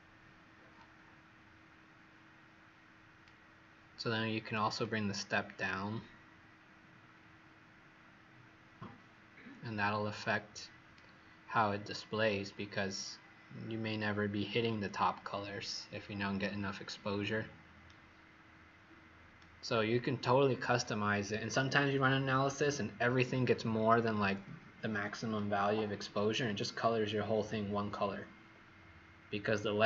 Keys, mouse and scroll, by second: 0.7 click, 17.8 right click.